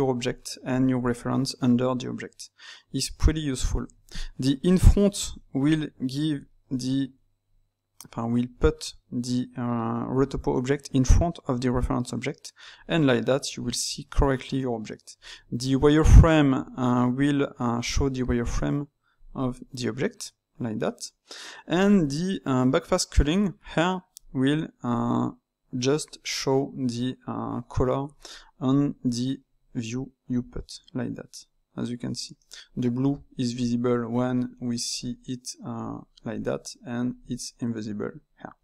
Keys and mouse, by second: 4.6 click, 5.3-10.2 ctrl+middle drag, 12.8 drag, 15.5 Tab, 17.8 click, 19.2 drag, 23.1 click, 24.1 click, 28.3-38.6 middle drag.